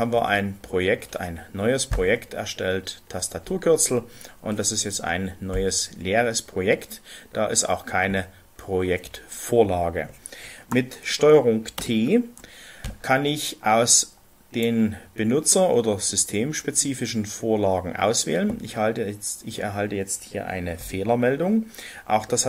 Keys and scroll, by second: 5.9 Return, 11.8 ctrl+t.